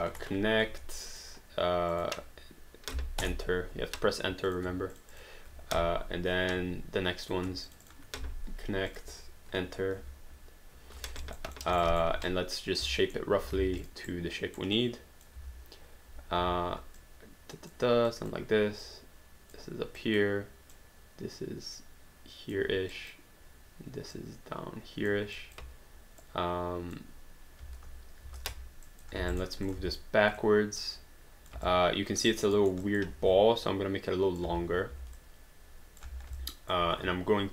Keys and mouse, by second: 0.1 Return, 1.1 click, 3.2 Return, 4.5 click, 4.9 shift+click, 7.2 click, 7.7 shift+click, 8.9 click, 10.0 Return, 11.2 alt+right click, 11.6 alt+middle click, 11.8 alt+right click, 12.2 q, 12.2 right click, 12.4 right click, 13.0 alt+middle click, 13.8 click, 14.1 right click, 14.8 click, 15.4 w, 17.0 click, 18.1 click, 20.0 click, 22.9 click, 24.2 click, 25.4 click, 27.6 space, 28.9 alt+click, 29.2 alt+d, 29.3 alt+right click, 29.7 click, 29.8 w, 30.4 click, 31.7 alt+click, 32.4 alt+right click, 32.6 alt+middle click, 32.8 alt+click, 33.2 r, 33.6 click, 35.2 click, 36.4 alt+click.